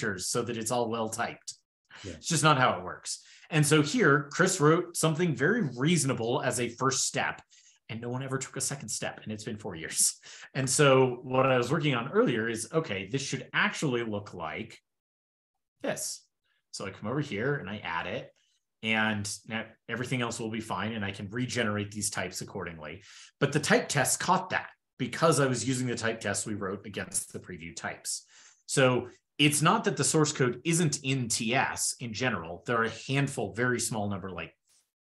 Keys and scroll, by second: 12.0 ctrl+p, 12.2 ctrl+p, 12.4 ctrl+p, 12.4 ctrl+p, 12.9 ctrl+f, 13.3 shift+super+], 15.8 super+c, 16.6 shift+super+[, 17.3 super+v, 19.1 super+s.